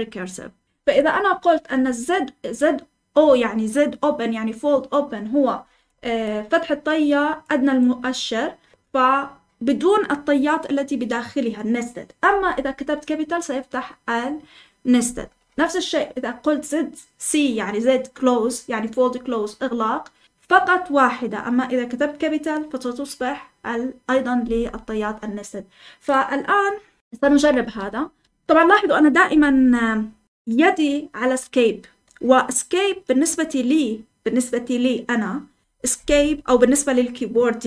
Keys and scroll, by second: 27.1 Escape, 28.0-28.9 typing.